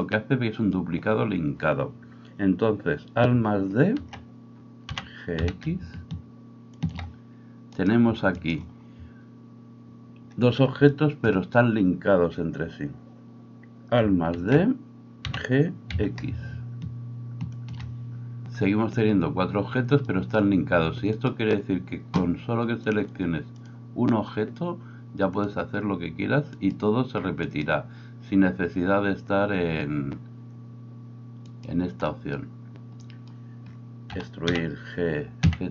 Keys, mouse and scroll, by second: 0.0-7.8 middle drag, 4.0 alt+d, 7.8 right click, 8.1 shift+middle click, 8.4 shift+right click, 8.5-21.2 middle drag, 14.4 alt+d, 21.2-22.9 right drag, 22.9-35.7 drag, 26.6 middle click, 26.6 right click, 27.5 middle click, 27.5 right click, 31.5-33.7 middle drag, 31.5-33.7 right drag, 34.1 e.